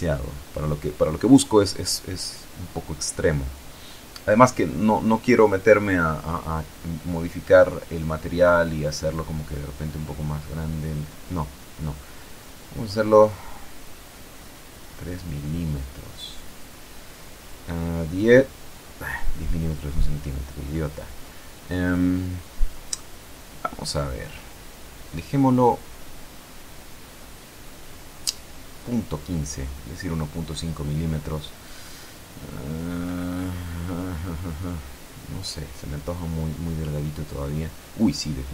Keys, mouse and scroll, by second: 3.0 Escape, 5.3 click, 7.2 BackSpace, 8.1 Delete, 9.3 KP_Decimal, 10.1 KP_3, 10.7 KP_Enter, 14.0 click, 15.3 Home, 17.2 Delete, 17.8 KP_1, 18.0 KP_0, 18.2 KP_Enter, 20.5 click, 20.8 click, 22.8 End, 23.5 Home, 24.0 Delete, 26.2 KP_Decimal, 27.7 KP_1, 28.0 KP_5, 29.0 KP_Enter, 35.2 F12.